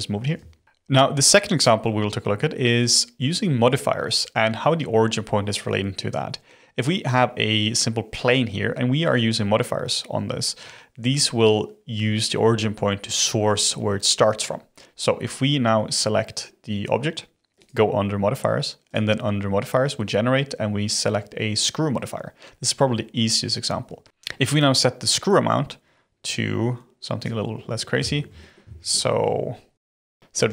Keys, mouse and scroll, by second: 0.7 click, 15.8 click, 17.5 click, 18.8-21.8 drag, 24.0 ctrl+z, 25.0-27.4 drag, 27.4-28.0 scroll down 10, 28.0-28.6 shift+middle drag, 28.6 shift+scroll down 3, 28.9 shift+middle click, 29.7 shift+click.